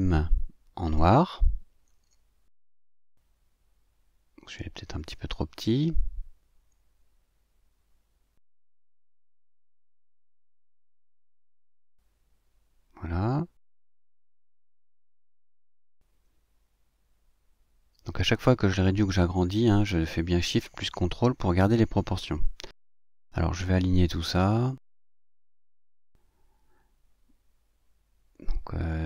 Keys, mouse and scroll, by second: 4.7 click, 5.5-7.1 ctrl+shift+drag, 8.1 click, 10.4 click, 11.2-12.3 ctrl+shift+drag, 15.7 click, 17.3-18.7 ctrl+shift+drag, 19.0-22.2 drag, 22.9 click, 24.1 click, 24.3 click, 27.2 click.